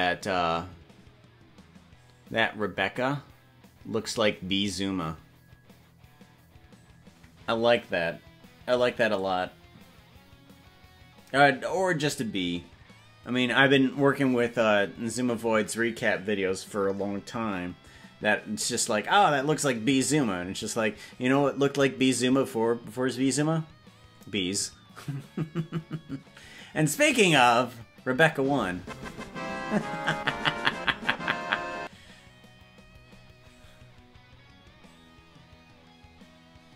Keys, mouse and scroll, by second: 19.2 click, 25.6 click, 35.2 click.